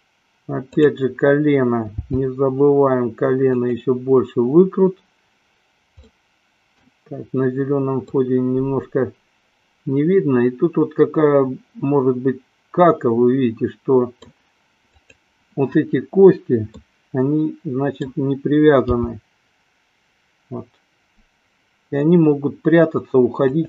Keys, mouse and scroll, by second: 2.4 g, 3.9 click, 6.2-7.2 middle drag, 8.4-14.3 middle drag, 14.9 click, 17.0-18.4 middle drag, 19.2 g.